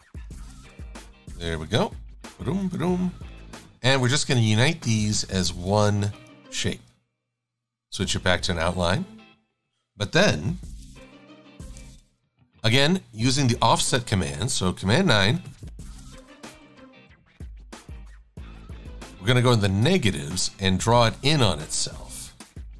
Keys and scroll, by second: 3.0 shift+x, 8.6 shift+x, 14.4 super+9, 16.0 Down, 17.0 Down, 17.6 Down, 20.5 Down.